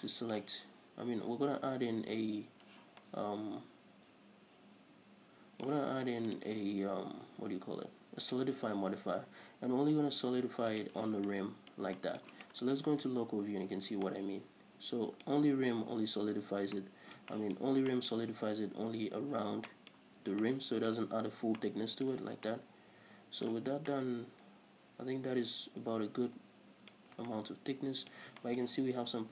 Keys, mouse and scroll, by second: 0.0 scroll up 1, 0.4-6.5 middle drag, 3.2 scroll down 2, 6.7-11.3 drag, 12.0-29.3 middle drag, 13.2 KP_Divide, 14.0-14.4 scroll up 2, 18.0 scroll up 2, 27.3-27.6 scroll up 2.